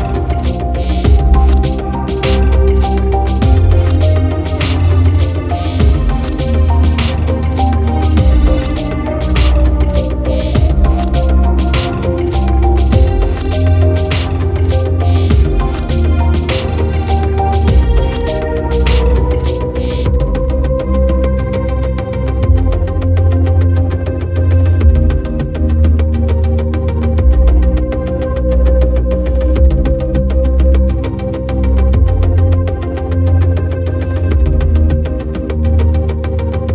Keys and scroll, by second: 1.0 ctrl+0, 1.9 ctrl+=, 2.7 ctrl+-, 3.4 ctrl+t, 7.6 ctrl+j, 7.9 ctrl+t, 26.4 ctrl+j, 26.8 ctrl+t, 35.7 ctrl+j.